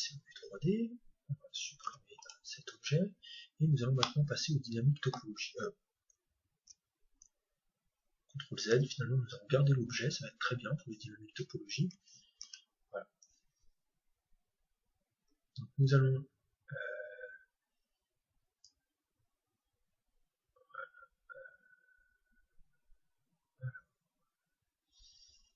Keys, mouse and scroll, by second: 0.0 click, 3.6-6.0 middle drag, 8.1 ctrl+z, 10.0-11.3 scroll up 1, 11.3-11.9 scroll up 1, 11.5 middle click, 11.9 Tab, 12.5 Tab, 18.6-20.5 drag.